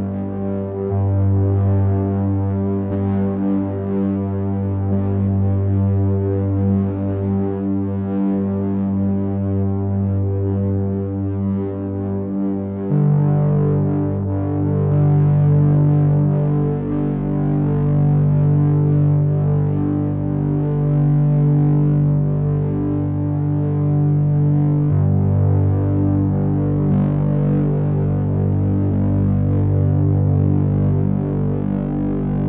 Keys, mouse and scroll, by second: 2.1 s, 8.9 click, 11.2 a, 11.9 a, 17.7 click, 20.6 click, 21.4 click.